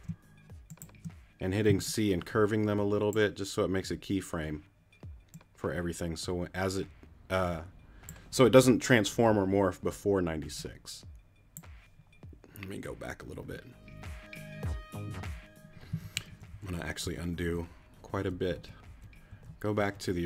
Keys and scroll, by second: 1.7 shift+c, 16.0 super+z, 16.6 super+z, 17.1 super+z, 18.4 super+z, 19.6 super+z.